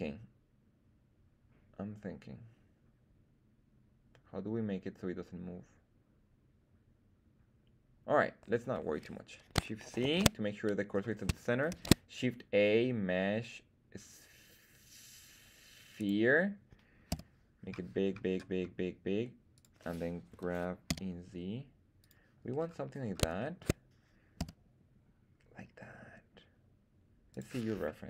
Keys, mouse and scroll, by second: 10.0 shift+c, 10.8-11.5 scroll up 2, 11.6 shift+a, 17.0 s, 19.5 click, 20.2 g, 20.8 z, 21.9 click, 22.5-22.9 scroll up 2, 22.9 scroll down 1, 23.3 shift+middle drag, 24.3 s, 27.2 click.